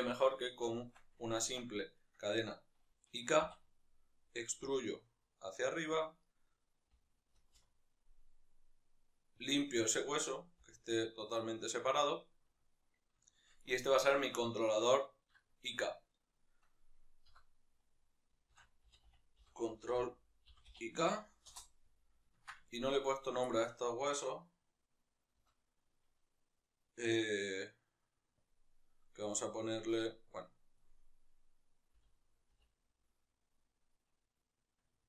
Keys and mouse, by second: 0.2-1.7 shift+middle drag, 0.7 Tab, 1.7 right click, 3.1 e, 5.7 click, 6.0-9.2 right drag, 9.2 alt+p, 10.3 g, 13.0-22.8 shift+middle drag, 22.8 right click, 23.2-35.0 shift+middle drag.